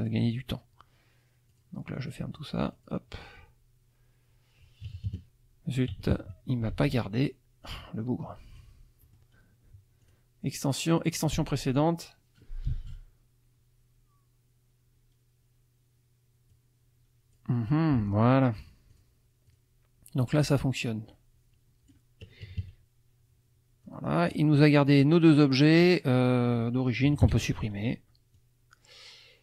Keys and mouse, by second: 0.0 click, 1.5 click, 2.1 click, 2.7 click, 4.8 KP_Subtract, 5.1 KP_Add, 6.1 KP_Subtract, 6.7 ctrl+z, 7.6-8.8 drag, 9.0 middle click, 10.0 click, 10.9 click, 16.5 click, 18.9 click, 19.5 click, 20.2-22.1 drag, 22.4 KP_Subtract, 23.8-24.7 drag, 25.0-26.0 drag, 27.2 Delete, 28.4-29.4 drag.